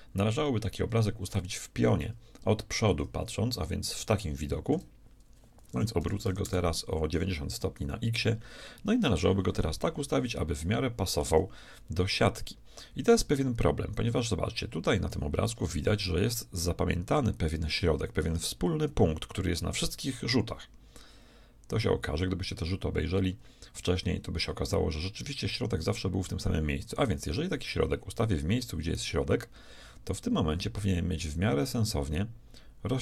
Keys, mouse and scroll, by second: 2.9 KP_1, 5.8 r, 10.6-12.4 shift+middle drag, 14.8 middle click, 29.0 g.